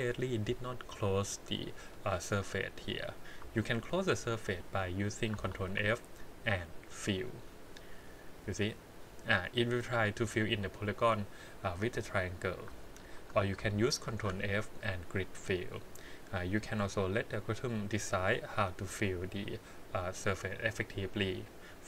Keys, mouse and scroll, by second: 2.4 middle click, 3.9 alt+click, 4.4 alt+click, 5.6 ctrl+f, 7.9 middle click, 8.6 scroll up 2, 13.0 ctrl+z, 14.0 ctrl+f, 16.6 click, 18.0 middle click.